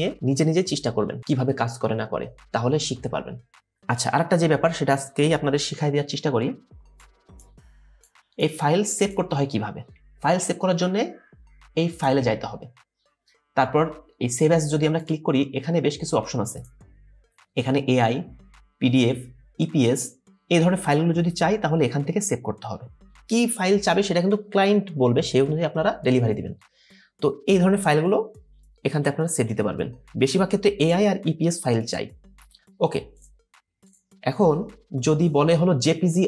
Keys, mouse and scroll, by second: 6.1 alt+scroll down 1, 10.1 scroll down 1.